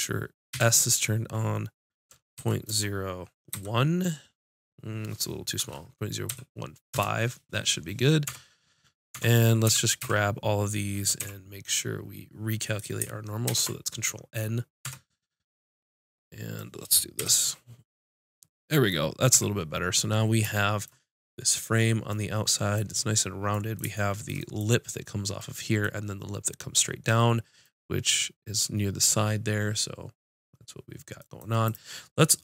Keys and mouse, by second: 8.3 Tab, 9.1 Tab, 9.7 a, 10.0 a, 11.2 w, 13.5 ctrl+n, 14.8 Tab, 17.2 KP_5, 19.3 a, 27.7-31.2 drag, 27.7-31.2 right drag, 31.4-32.4 drag.